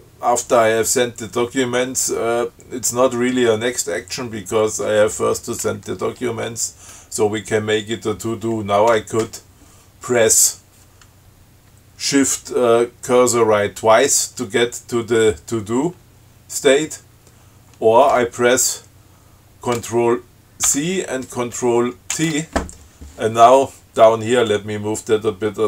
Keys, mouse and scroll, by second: 20.9 ctrl+c, 22.4 ctrl+t, 24.7 click.